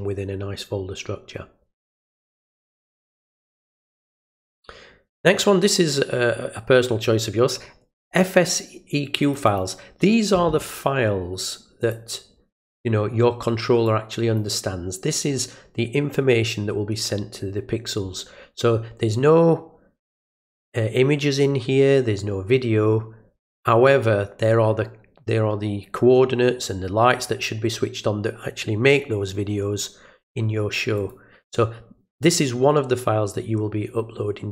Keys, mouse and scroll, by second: 1.8 click, 3.4 click, 5.2 click, 9.2 click, 9.5 click, 11.8 click, 13.9 click, 31.0 click, 32.3 click.